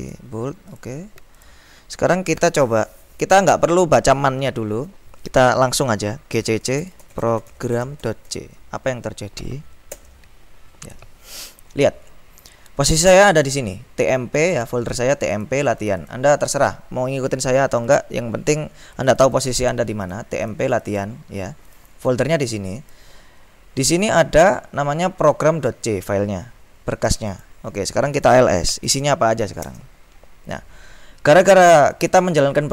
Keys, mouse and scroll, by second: 0.2 click, 0.9-2.2 drag, 6.2-8.9 typing, 10.1 Return, 13.5-16.7 drag, 18.0 click, 19.1 click, 20.1-21.6 drag, 22.9 click, 25.4-28.0 drag, 28.2 click, 28.6-29.6 typing, 32.1 click.